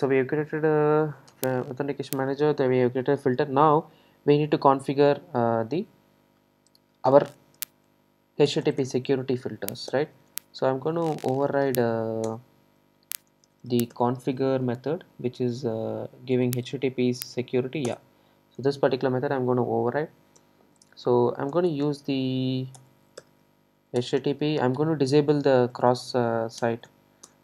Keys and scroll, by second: 24.0 Return.